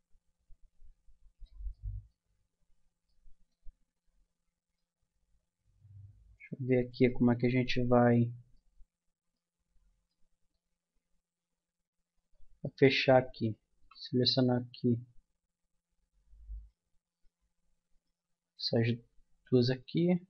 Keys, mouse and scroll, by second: 1.3-3.1 middle drag, 3.2 middle click, 4.8 middle click, 5.7-6.9 middle drag, 7.7 middle click, 12.1-13.8 drag, 13.3-15.9 middle drag, 16.5-20.2 right drag, 19.7 f.